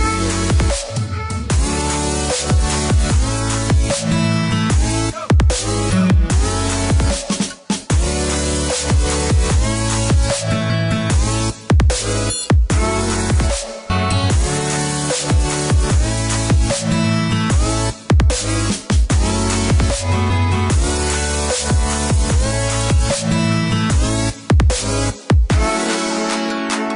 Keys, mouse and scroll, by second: 0.5 click, 1.3 click, 1.7 scroll up 1, 3.1 click, 7.0 click, 12.1 click, 12.9 click, 13.7 KP_4, 14.0 KP_0, 14.3 KP_Enter, 14.9 Escape, 15.9 click, 18.0 click, 18.9 space, 19.5 click, 20.2 click, 21.8 scroll down 1, 22.3 KP_5, 22.7 KP_Enter, 24.6 click, 26.4-26.9 scroll up 1.